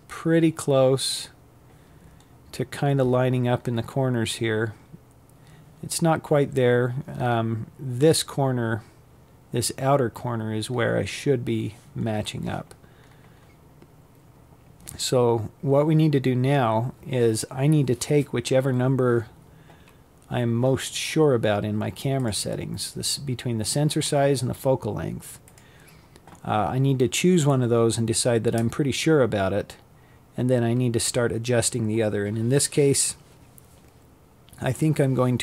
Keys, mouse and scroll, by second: 1.1 scroll up 5, 1.8-2.6 scroll down 8, 3.6-4.6 scroll up 2, 4.6 scroll up 5, 8.4-10.4 scroll down 7, 10.4-11.4 scroll up 7, 11.4-11.9 scroll down 7, 12.9-13.6 scroll up 1, 13.6-19.9 scroll down 1, 19.9 click, 20.5-21.3 scroll down 3, 21.3-23.1 scroll up 1.